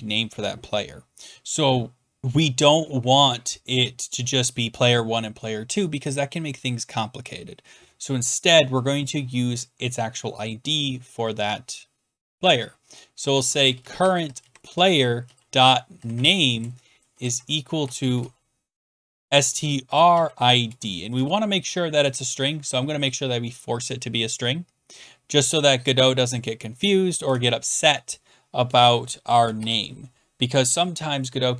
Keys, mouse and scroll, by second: 12.9-21.2 typing, 22.0 Return, 28.8 click, 29.3 BackSpace, 29.6 shift+p, 30.7 click.